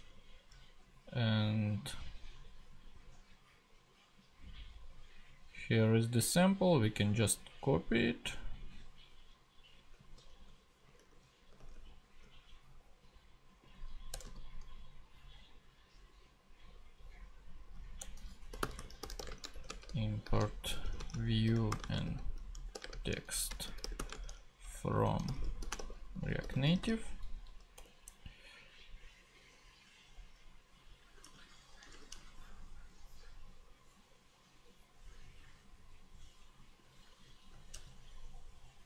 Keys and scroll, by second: 11.0 super+Tab, 14.1 Return, 14.2 super+v, 18.0 Return, 18.3-27.8 typing, 23.3 super+Right, 27.5 Right, 31.2 super+Tab, 37.6 super+c, 37.7 super+Tab.